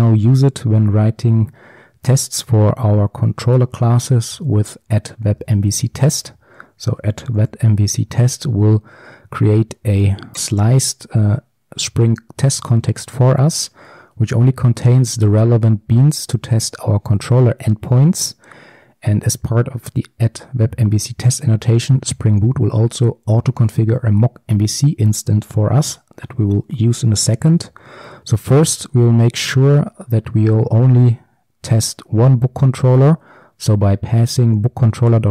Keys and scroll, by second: 5.0 Return, 28.7 Return.